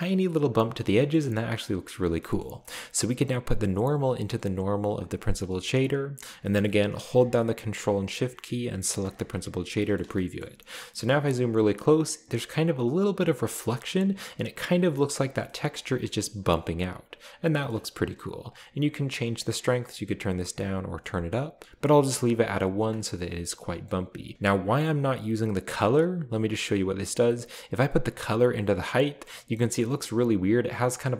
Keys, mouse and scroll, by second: 1.1 shift+middle click, 1.6-2.4 scroll down 2, 2.4 middle drag, 2.6-3.4 scroll up 2, 3.6-4.9 drag, 5.5 click, 6.6-7.2 middle drag, 9.0 ctrl+shift+click, 9.7 click, 9.9-11.6 scroll up 1, 10.0 middle drag, 10.4-11.0 shift+middle drag, 11.3-12.2 middle drag, 14.7-15.6 scroll down 2, 14.9-15.4 shift+middle drag, 15.8 shift+middle click, 16.0-16.3 shift+scroll up 3, 16.1 middle click, 17.0-17.5 scroll up 1, 17.7 middle click, 17.9-19.3 drag, 19.0 right click, 19.6-21.0 drag, 20.8 right click, 21.5 click, 21.6 alt+h, 21.6 a, 22.0 click, 23.2-24.2 scroll down 2, 23.6-23.9 middle drag, 24.5 click, 27.2-28.8 drag, 29.0 click, 30.0 middle click, 30.1-30.8 scroll up 1.